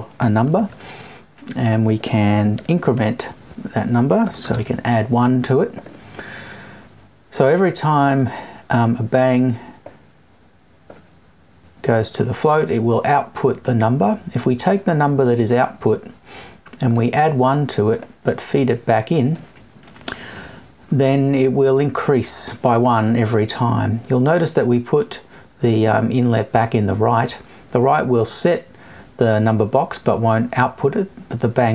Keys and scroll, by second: 4.2 BackSpace.